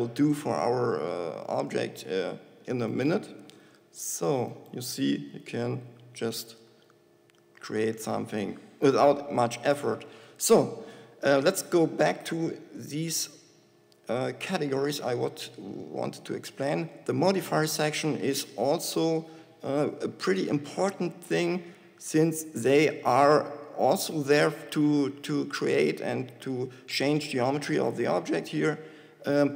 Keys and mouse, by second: 3.9 e, 6.0 g, 10.0 g, 10.8-13.1 drag, 15.3-20.8 drag, 28.2 Tab.